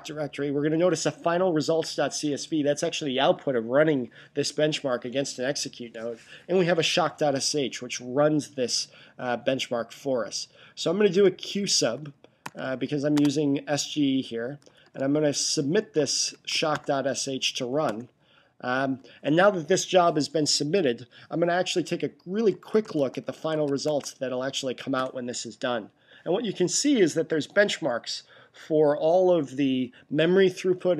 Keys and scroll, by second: 11.4-13.1 typing, 14.3-17.1 typing, 22.2-24.0 typing.